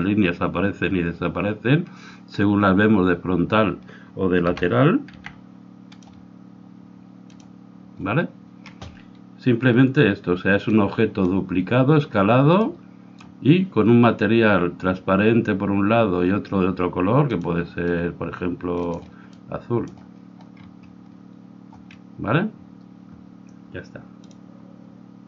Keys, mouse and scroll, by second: 4.5 r, 7.3-12.6 drag, 9.0-10.8 middle drag, 12.6-16.8 middle drag, 17.5-20.0 drag.